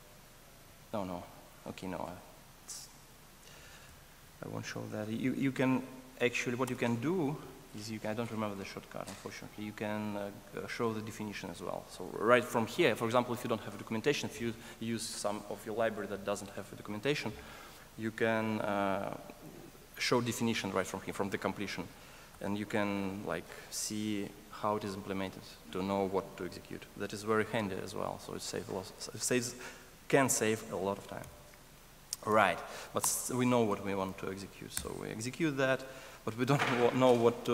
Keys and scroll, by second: 6.7 ctrl+space, 10.5 ctrl+alt+space, 32.4 Escape, 33.1 ctrl+space, 34.7 ctrl+space, 35.3 Return.